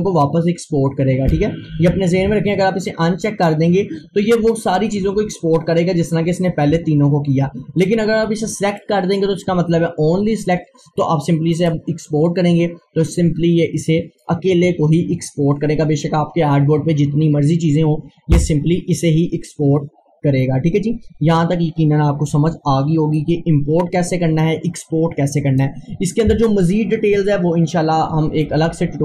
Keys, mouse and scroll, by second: 10.9 click, 11.6 click, 23.2-28.3 drag.